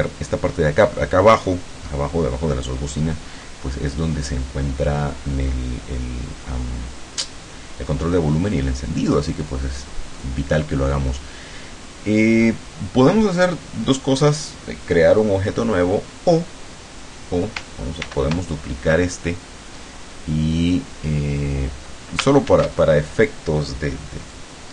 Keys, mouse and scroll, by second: 9.5 click, 10.2 click, 18.1 ctrl+d, 22.5 ctrl+shift+f, 24.3-24.7 drag.